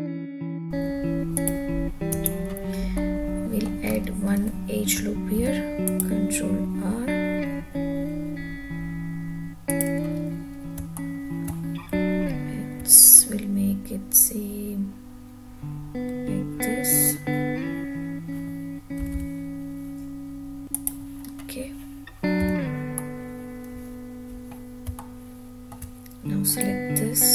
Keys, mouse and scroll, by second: 0.0 alt+z, 0.1 click, 0.4 ctrl+s, 0.4 middle click, 0.6 `, 1.4 click, 2.1 Tab, 2.9 middle click, 4.0-4.9 scroll up 4, 5.4 ctrl+r, 9.7 click, 10.2 scroll down 1, 10.9-11.4 shift+middle drag, 12.0 `, 19.1 g, 20.8 drag, 21.2-22.5 scroll down 1, 22.5 3, 22.9-24.6 middle drag, 25.0-25.7 shift+middle drag, 26.5 click.